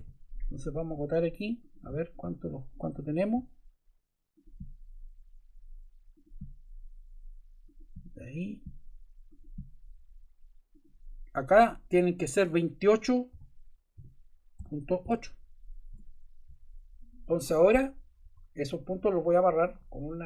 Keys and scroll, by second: 13.3 2, 13.9 8, 14.5 ., 15.0 8, 15.9 Return, 18.2 Escape.